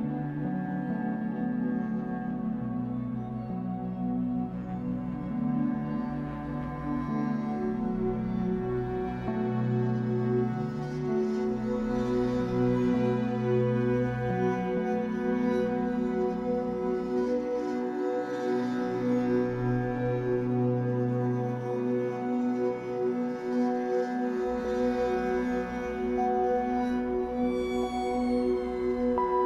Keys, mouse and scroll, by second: 0.1 alt+middle click, 0.4 alt+middle click, 1.0 scroll up 1, 1.1-1.4 scroll down 5, 1.4 shift+middle click, 1.7-3.5 scroll up 3, 1.8 g, 3.5 alt+s, 5.8-6.7 scroll up 4, 6.1 shift+middle click, 6.7-7.1 scroll down 1, 7.1 shift+middle click, 7.6-8.1 scroll up 1, 8.1 click, 8.4-13.2 typing, 9.1 click, 9.8 click, 10.4 click, 11.1 click, 11.7 click, 12.4 click, 13.1 click, 15.1-15.6 scroll down 2, 15.6 a, 16.2 scroll down 2, 16.6-17.9 scroll up 4, 17.9 click, 18.3-23.6 typing, 25.1 shift+click, 25.7 alt+n, 27.3 shift+x, 28.8 click, 29.2 l.